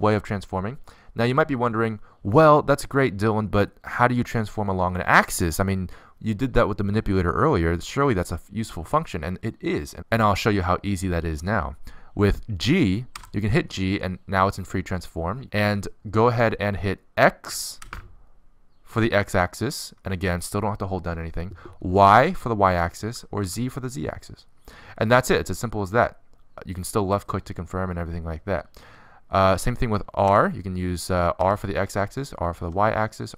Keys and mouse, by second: 13.8 g, 31.1 r.